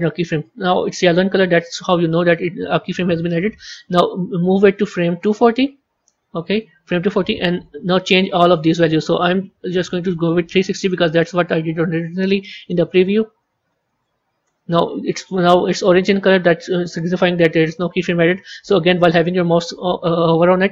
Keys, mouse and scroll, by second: 3.5-6.6 drag, 8.3-10.8 drag, 11.0-12.6 drag, 12.7-15.7 drag.